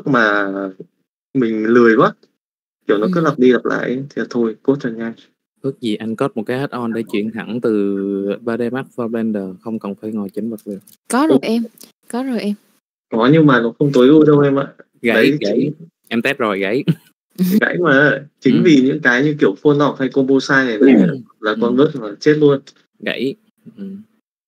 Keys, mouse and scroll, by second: 0.9 middle click, 2.2 middle click, 3.2-4.3 middle drag, 5.8 click, 6.3 middle click, 9.0 click, 9.8 click, 24.4 click.